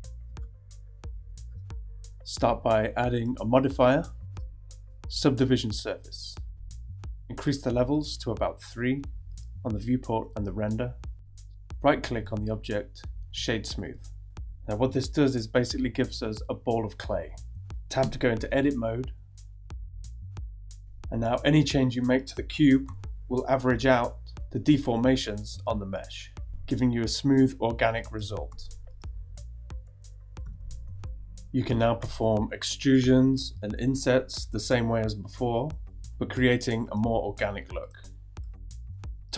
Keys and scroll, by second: 18.0 Tab, 22.8 g, 25.3 g, 26.9 g, 27.6 g, 28.5 g, 29.4 super+z, 30.8 super+z, 32.0-34.7 typing, 36.6 e, 38.0 super+z.